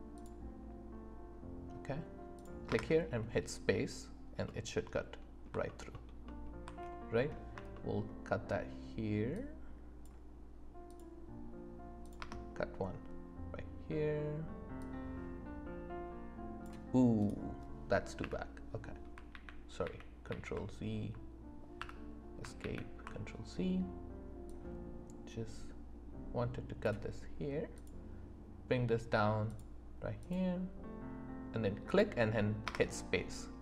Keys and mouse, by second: 0.1 click, 2.3 click, 2.7 space, 4.4 middle click, 5.1-5.4 middle drag, 5.9 alt+middle click, 7.7 shift+middle click, 10.8 middle click, 12.0 click, 12.2 space, 14.8 click, 17.2 click, 18.2 Delete, 19.3 ctrl+z, 21.8 Escape, 22.6 ctrl+z, 24.5-25.6 drag, 27.7 click, 29.4 click, 30.2 click, 31.8 click, 32.7 space.